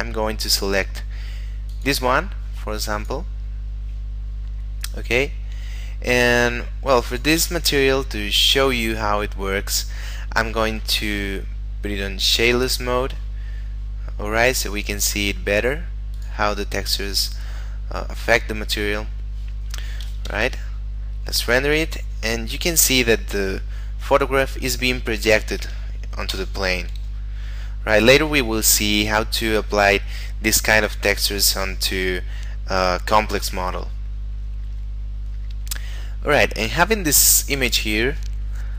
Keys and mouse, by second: 1.7 click, 7.1 click, 11.1 middle click, 12.3 click, 15.2 middle click, 16.2 click, 17.0 middle click, 20.2 F12, 26.2 Escape, 27.3 middle click, 33.9 middle click.